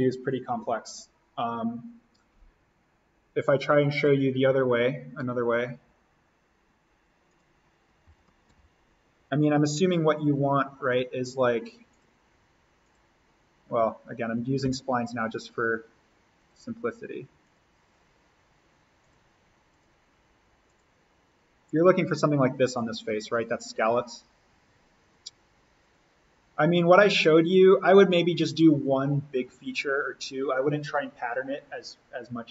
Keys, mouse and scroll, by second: 3.3-7.2 drag, 8.0 alt+s, 8.4 alt+n, 9.1-10.7 scroll down 1, 10.7 a, 11.9 click, 14.1 Escape, 14.6 s, 16.3 click, 29.3 Escape.